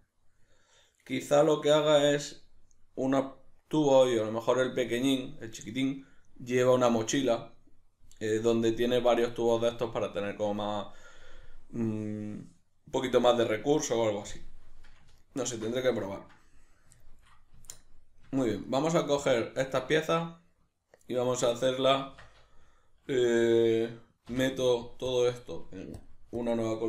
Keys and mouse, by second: 17.6 Tab, 18.7 right click, 19.3 Tab, 19.8-26.8 shift+middle drag, 22.1 Tab.